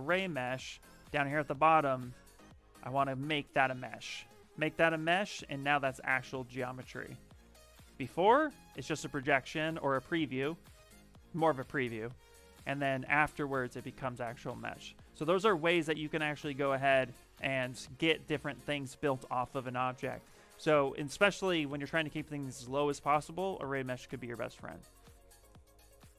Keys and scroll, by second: 1.7 shift+m, 4.9 shift+f, 5.4 s, 7.0 shift+m, 7.7 ctrl+z, 10.6 ctrl+shift+z, 11.9 ctrl+z, 12.8 ctrl+shift+z, 14.1 ctrl+z.